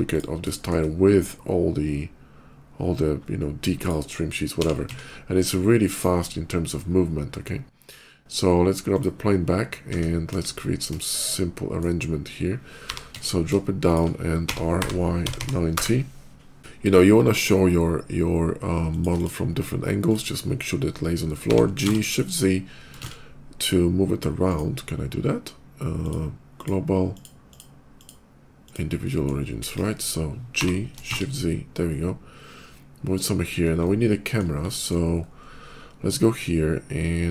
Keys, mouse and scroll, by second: 0.3 shift+middle click, 3.2 shift+middle click, 3.6 click, 4.5 r, 4.7 z, 5.8 right click, 8.7 click, 10.1 KP_5, 10.8 middle click, 11.2 middle click, 12.7 g, 12.9 z, 14.3 r, 14.6 y, 15.1 9, 15.3 0, 15.6 Return, 16.4 g, 16.6 z, 18.7 shift+click, 19.0 shift+click, 19.9 shift+click, 21.3 g, 21.8 shift+z, 22.8 shift+z, 24.2 middle click, 25.8 click, 26.4 click, 26.8 click, 27.3 click, 27.8 click, 28.5 click, 28.8 middle click, 29.5 KP_5, 30.6 g, 30.9 g, 30.9 shift+z, 32.9 click, 33.2 middle click, 33.4 middle click, 33.7 middle click, 34.4 middle click, 35.2 scroll up 1, 35.5 middle click, 36.0-37.3 middle drag.